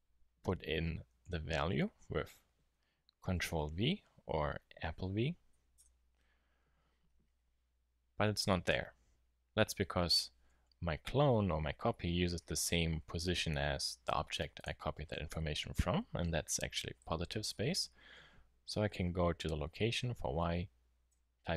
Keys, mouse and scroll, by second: 16.5-21.5 middle drag.